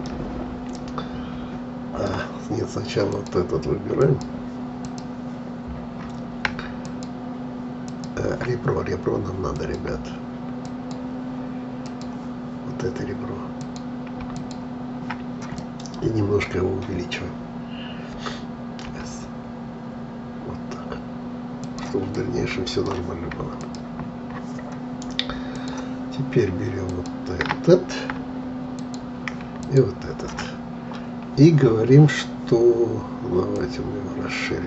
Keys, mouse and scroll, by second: 3.1-15.5 drag, 15.5-18.6 middle drag, 18.9 s, 22.1-23.5 middle drag, 23.5-32.6 drag, 33.4-34.6 drag.